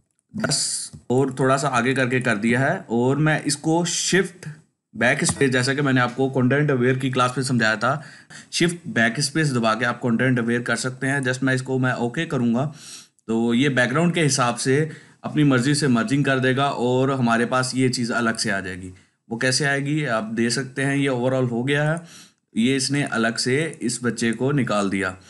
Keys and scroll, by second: 5.2 shift+BackSpace.